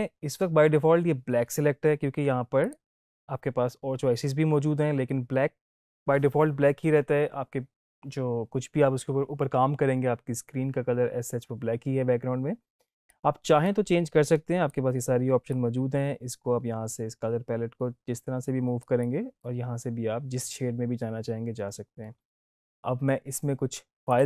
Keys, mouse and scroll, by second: 22.0 click, 24.0 click.